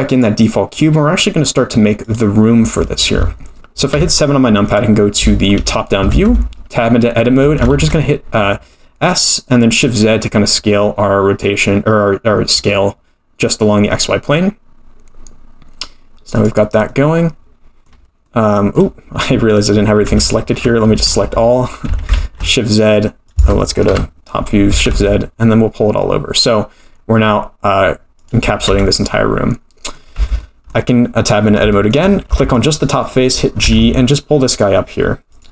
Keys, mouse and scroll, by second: 0.1 click, 0.8 middle click, 2.0 click, 3.9 KP_7, 4.8-5.2 scroll down 3, 5.3 shift+middle click, 6.1 Tab, 7.4 s, 16.9-17.9 middle drag, 18.2 middle click, 19.2 middle click, 20.2 ctrl+z, 20.9 a, 21.9 s, 23.9 KP_7, 24.7 s, 28.7 Tab, 29.0 middle click, 30.2 Tab, 30.4 middle click, 31.7 shift+middle click, 32.3 3, 32.5 click, 33.0 middle click, 33.6 g.